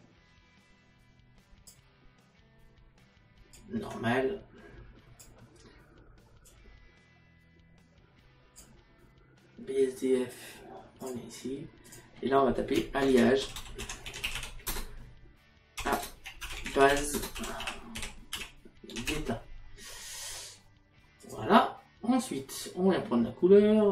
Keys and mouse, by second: 3.6 click, 6.5 click, 11.1 click, 15.8-16.5 typing, 21.2 click.